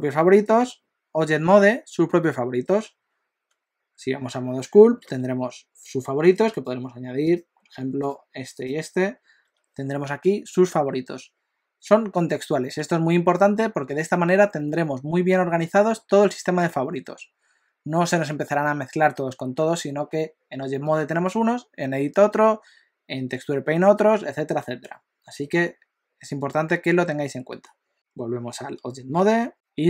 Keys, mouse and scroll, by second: 0.5 Tab, 1.6 q, 3.5 Tab, 5.0 q, 6.5 right click, 8.0 right click, 9.4 q, 27.9 Tab.